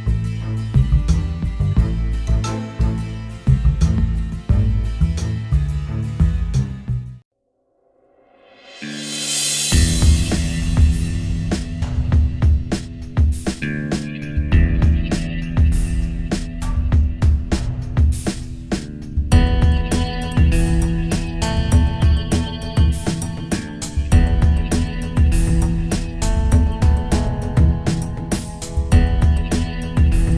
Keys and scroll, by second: 6.7 ctrl+z.